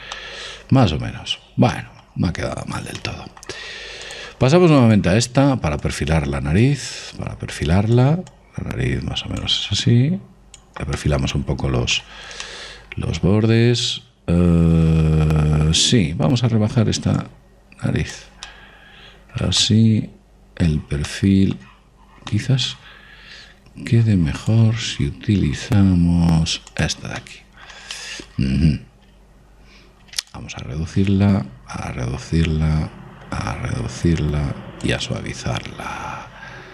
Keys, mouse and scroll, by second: 0.4 middle click, 0.7-5.5 middle drag, 4.6-12.3 drag, 11.6-14.8 middle drag, 15.6-16.9 middle drag, 17.8 click, 19.1-24.5 middle drag, 24.7 middle click, 25.0 click, 27.8-30.2 middle drag, 30.9 click, 35.6 click.